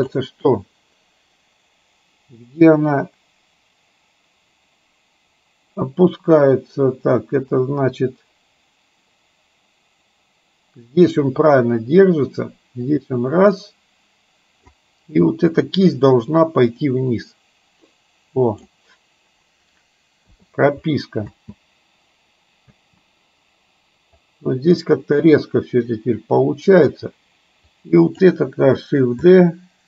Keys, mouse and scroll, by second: 2.7-14.8 drag, 16.9-18.7 drag, 21.3 space, 22.7 space, 24.3-26.9 drag, 27.7-28.3 drag, 29.3 shift+d.